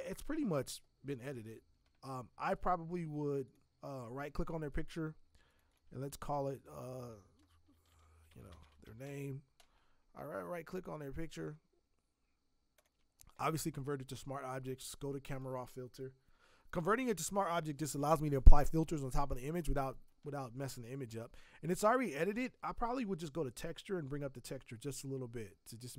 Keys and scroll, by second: 7.8-9.5 typing.